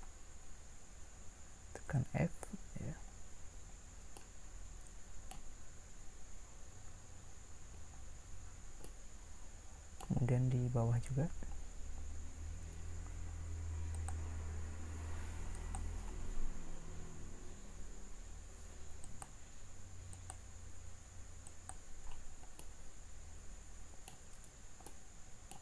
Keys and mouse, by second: 1.8 f, 22.9-24.4 middle drag.